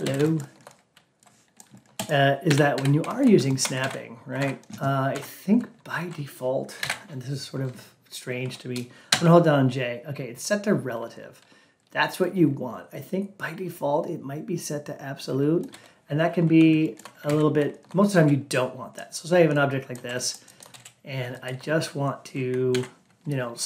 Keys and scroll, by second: 3.7 ctrl+a, 6.7 alt+p, 17.2 ctrl+a, 22.6 ctrl+a.